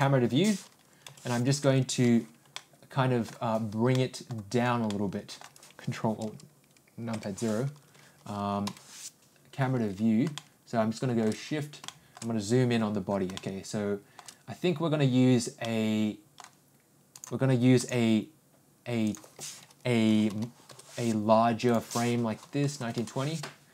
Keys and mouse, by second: 1.0 n, 2.5 alt+middle click, 3.9-4.3 middle drag, 4.8 middle click, 8.6 ctrl+n, 10.3-11.2 middle drag, 11.8 middle click, 13.3-14.1 shift+middle drag, 15.6 middle click, 17.1 click, 19.1-21.3 drag, 21.8-23.6 drag.